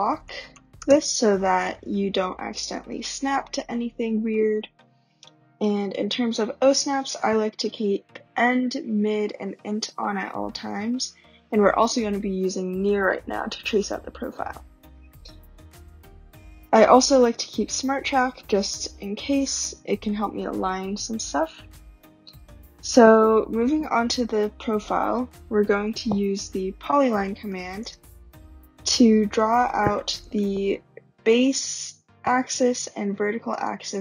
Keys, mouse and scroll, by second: 0.0-0.9 typing, 2.5 typing, 2.8 scroll, 5.9-7.9 middle drag, 23.4 scroll, 24.4 scroll, 26.3-28.4 typing, 29.5 typing, 30.3-32.0 drag, 33.6 shift+click.